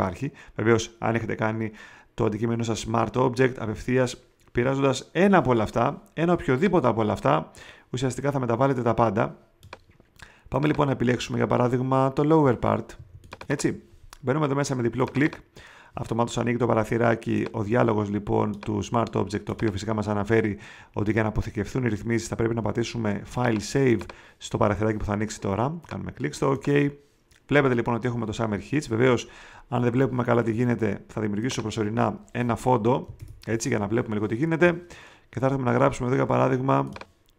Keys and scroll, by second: 12.9 space, 33.1 alt+BackSpace.